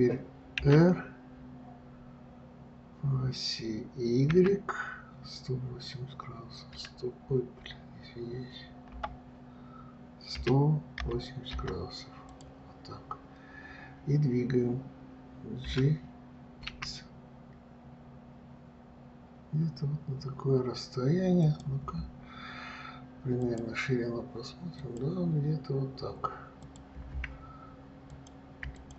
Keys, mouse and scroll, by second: 0.9 r, 15.9 g, 26.9 click, 28.4 click.